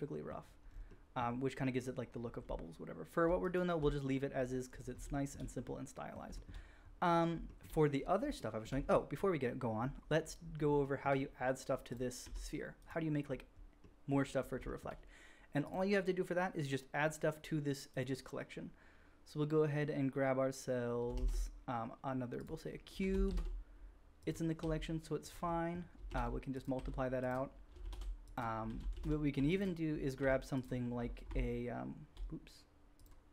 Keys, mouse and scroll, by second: 0.1 middle click, 5.3-11.9 middle drag, 11.9 click, 12.2 g, 12.8-15.6 middle drag, 15.6 click, 15.7-17.9 middle drag, 17.9-24.6 drag, 21.1 shift+a, 23.0 g, 24.6 r, 26.1 shift+d, 26.7 r, 27.9 shift+d, 28.1 click, 28.6 g, 28.7 shift+right click, 29.0-30.3 drag, 30.1 r, 31.1 shift+click, 31.4 shift+F3, 31.4 shift+click, 31.4 g, 31.4 r, 33.1 click, 33.1-33.3 middle drag, 33.1 right click.